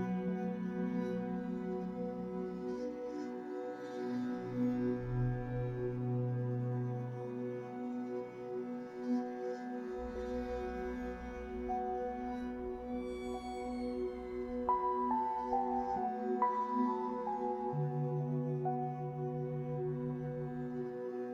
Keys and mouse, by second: 1.8 middle click, 3.4 1, 5.9 shift+middle click, 11.3 ctrl+z, 12.3 z, 14.2 ctrl+z, 14.8 x, 18.3 ctrl+z, 18.7 ctrl+z, 19.4 ctrl+z.